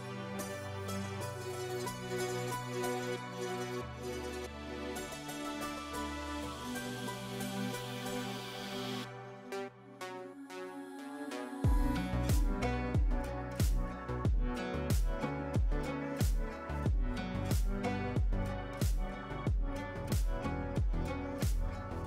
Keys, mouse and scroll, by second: 1.1-6.1 drag, 8.0 b, 9.0 click, 11.3-11.6 click, 12.5 click, 13.2 F3, 14.0 F2, 14.3-16.2 drag, 18.6 shift+F2, 19.3 right click, 20.1 click.